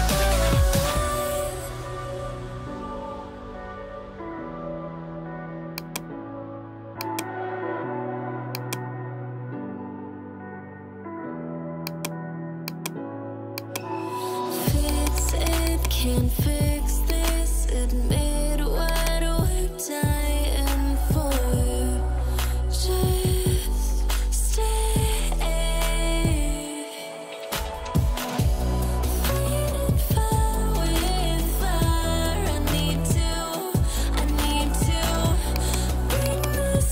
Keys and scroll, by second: 2.4-4.9 typing, 16.6 [.